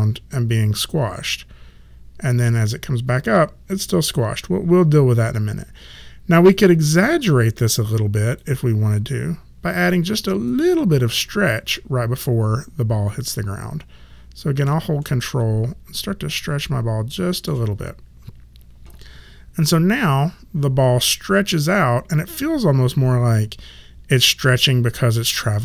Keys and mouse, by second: 7.0 click, 15.0 ctrl+middle click, 19.6 click.